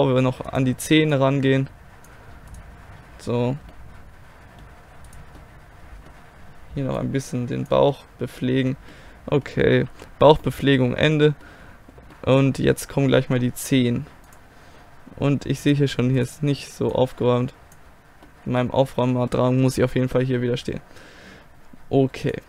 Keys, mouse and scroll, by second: 2.4 click, 3.7 click, 3.8-7.2 middle drag, 7.2 click, 7.9-8.9 middle drag, 9.9 a, 14.3-18.7 drag, 16.2-18.1 right drag, 18.7-22.3 middle drag, 22.3-22.4 drag.